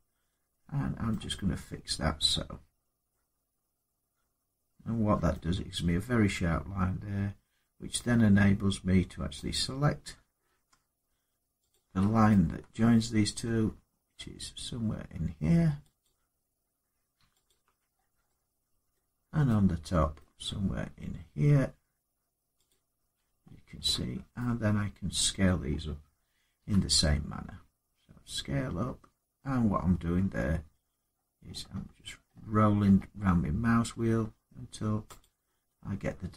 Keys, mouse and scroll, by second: 0.9 middle click, 1.3 scroll down 3, 1.4 scroll down 1, 2.5-2.9 scroll up 1, 5.1 middle click, 9.3 click, 9.3-11.4 scroll, 11.5 click, 12.5 shift+middle click, 12.9 scroll, 15.8 click, 16.2-17.2 scroll up 3, 17.2 alt+click, 17.7 scroll down 4, 18.7 middle click, 20.0 middle click, 22.4 click, 23.1 scroll down 3, 23.1 scroll up 1, 23.2-23.6 scroll down 1, 24.3 middle click, 26.3 s, 28.6 scroll down 2, 29.0-29.5 scroll up 4, 29.5 scroll down 1, 30.9-33.1 scroll down 24, 33.7-34.2 scroll up 4, 35.0 click.